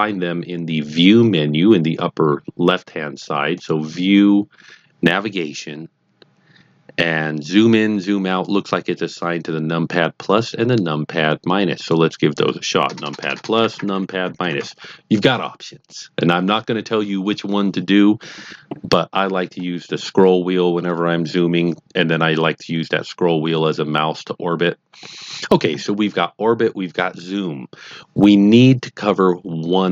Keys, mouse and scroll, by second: 3.5 click, 11.7 click, 12.8 KP_Add, 13.0 KP_Add, 13.2 KP_Add, 13.3 KP_Add, 13.5 KP_Subtract, 13.8 KP_Subtract, 14.0 KP_Subtract, 14.2 KP_Subtract, 14.3 KP_Subtract, 14.5 KP_Subtract, 19.5 scroll up 1, 19.8-20.1 scroll down 2, 20.1 scroll up 2, 20.3-22.3 scroll down 1, 22.3 middle click, 25.0 middle click.